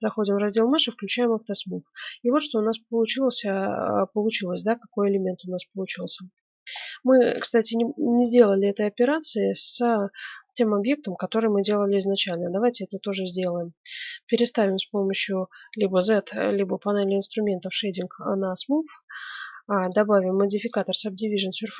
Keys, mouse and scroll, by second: 1.3 middle click, 1.7 click, 2.5 middle click, 4.5-9.0 middle drag, 9.2-12.2 middle drag, 12.2 right click, 13.0-14.9 middle drag, 14.6 z, 17.5-19.1 middle drag, 19.3-21.5 drag.